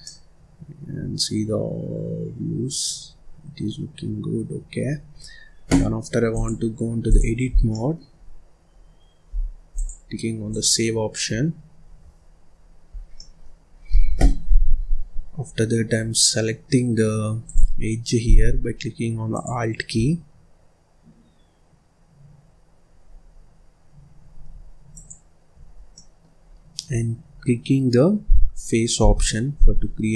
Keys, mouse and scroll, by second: 4.7 scroll up 1, 4.8-5.1 scroll down 2, 5.1-6.2 scroll up 2, 6.2-7.4 drag, 7.4 scroll down 1, 7.6 middle click, 8.1-9.6 scroll up 1, 9.6-11.2 drag, 11.2-11.7 scroll down 1, 11.7-12.4 scroll up 4, 12.4-12.8 scroll up 1, 12.8 scroll down 2, 13.0-14.6 middle drag, 14.6-15.0 scroll up 2, 15.0-15.4 scroll down 1, 17.3 click, 19.2 ctrl+click, 24.8 alt+click, 25.7 scroll down 1, 25.8 middle click, 26.3-26.8 scroll up 2, 26.8-27.2 scroll down 2, 27.2-28.9 scroll up 1, 28.9 f.